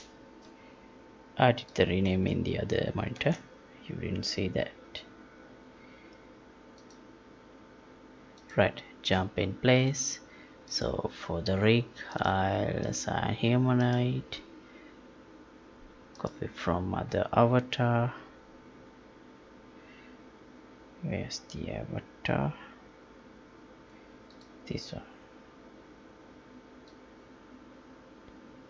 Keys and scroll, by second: 2.2 alt+Tab.